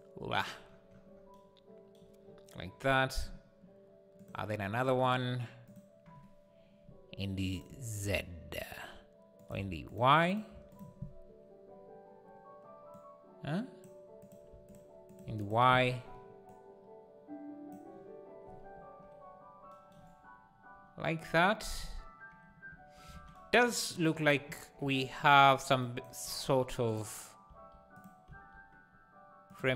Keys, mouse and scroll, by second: 0.0 click, 0.7 scroll down 2, 5.8-8.0 drag, 9.9 click, 10.3 click, 13.1-14.7 drag, 15.1 click, 16.6-23.1 drag, 23.1 alt+a, 25.8 shift+right click, 26.2 shift+a, 27.4 s, 28.2 s.